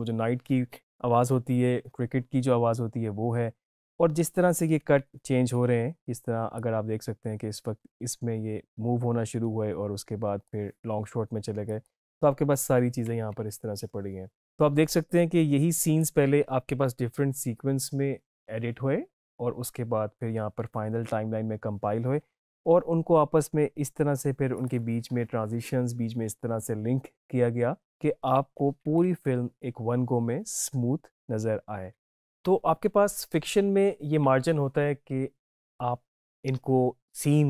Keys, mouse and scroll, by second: 6.6-11.8 drag, 15.0-18.4 drag, 24.7 click.